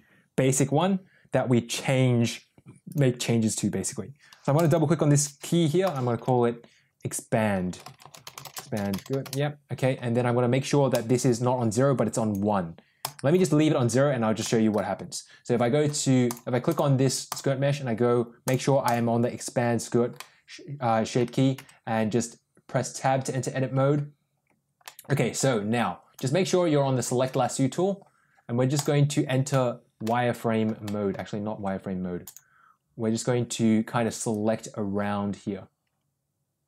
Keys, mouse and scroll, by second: 2.8 click, 4.5 click, 4.6-9.7 drag, 10.8-12.3 drag, 13.0 click, 14.3 middle click, 16.6 click, 17.2 click, 18.4 click, 18.8 click, 20.0-21.1 middle drag, 21.5 Tab, 24.8 middle click, 26.1 click, 28.6 click, 29.9 shift+middle click, 30.7 middle click, 32.1 click, 34.2-36.6 drag.